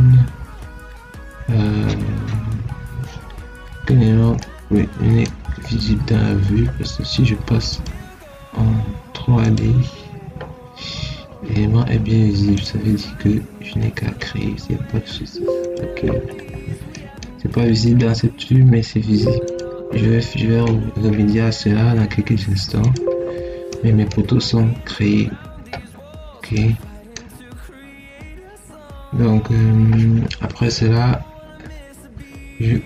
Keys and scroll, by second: 24.8 Escape.